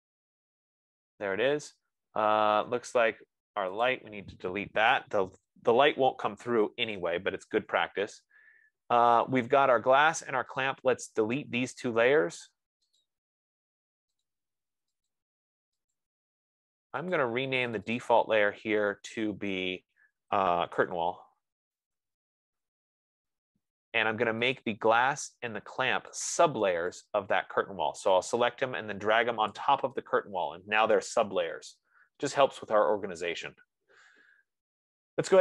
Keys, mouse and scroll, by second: 0.1 click, 3.8-9.4 drag, 5.8 F15, 5.9-7.1 typing, 11.2 click, 11.7 shift+click, 13.5 click, 14.8 click, 15.4 click, 16.3 click, 17.5 click, 18.1 click, 18.3 click, 19.3 ctrl+a, 20.9-24.1 typing, 25.0 click, 25.6 click, 26.6 shift+click, 29.8 click.